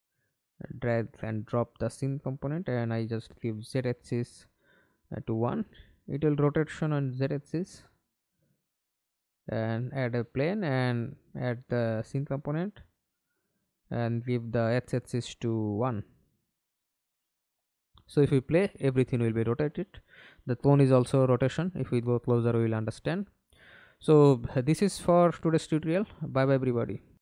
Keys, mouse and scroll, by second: 0.5 middle click, 1.0 ctrl+space, 5.1 1, 5.4 Return, 10.6 ctrl+space, 11.2 middle click, 11.7 ctrl+space, 16.4 1, 16.8 Return, 18.0 middle click, 18.5-19.1 scroll down 2, 19.8 alt+p, 23.0 middle click, 23.7-24.0 scroll up 3, 24.4 scroll down 2, 24.7-25.0 scroll up 3, 26.6-27.2 scroll down 6.